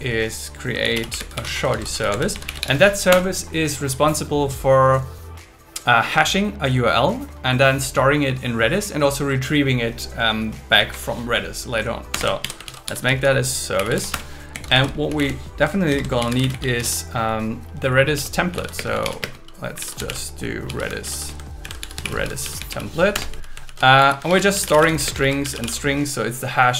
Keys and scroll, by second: 0.8 shift+s, 1.7 shift+s, 3.1 Return, 10.8 Up, 12.1 Return, 12.4 alt+l, 13.7 shift+s, 14.1 Return, 14.5 Down, 14.7 super+Right, 14.9 Left, 15.9 shift+8, 17.9 BackSpace, 18.7 space, 21.0 shift+., 21.2 space, 21.6 shift+r, 22.4 shift+t, 23.1 Return, 23.7 shift+,, 24.0 Left, 24.3 shift+s, 25.2 shift+s.